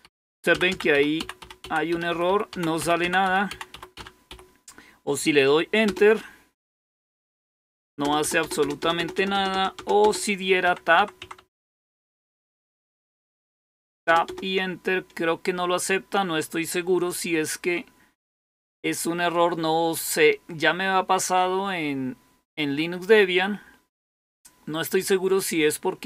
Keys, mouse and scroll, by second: 0.0-4.2 typing, 5.8 Up, 8.0 Down, 8.1 typing, 9.5 typing, 10.6 BackSpace, 10.9-11.3 Return, 12.2 Tab, 12.9-13.4 Tab, 13.6 Return, 13.8 Return, 14.0 Return, 14.2 Return.